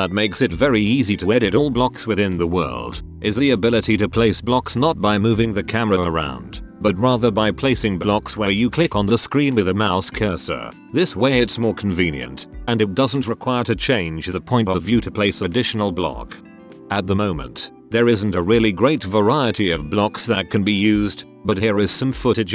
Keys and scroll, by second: 2.2-4.1 typing, 7.6-8.8 typing, 9.9 alt+a, 10.0 s, 11.4 w, 12.1 s, 13.3 w, 14.2 w, 16.6 w, 17.1 a, 18.4 e, 19.7-22.5 typing.